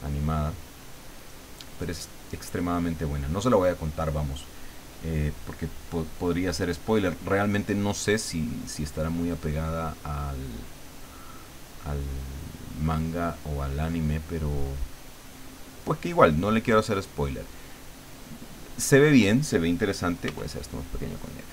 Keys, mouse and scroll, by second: 1.2-3.7 drag, 5.6 click, 6.9 click, 8.8 click, 10.2-12.5 drag, 12.8-14.7 drag, 15.4-16.9 drag, 17.3-18.8 drag, 20.2 f, 21.0 click, 21.4-21.5 drag.